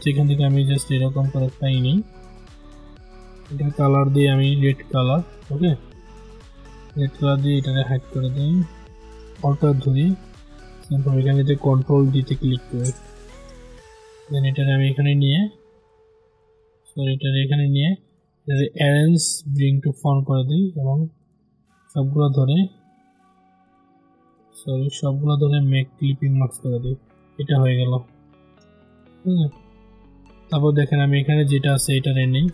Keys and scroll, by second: 11.4 ctrl+d, 16.3 ctrl+z, 21.1 ctrl+z.